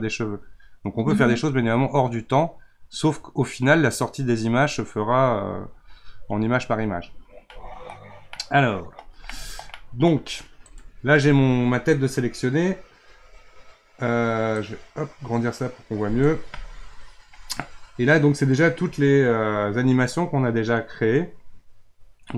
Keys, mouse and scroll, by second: 7.1-7.6 scroll up 4, 7.6 middle click, 8.0-8.3 scroll down 1, 8.3-10.6 middle drag, 10.6 click, 14.5 click.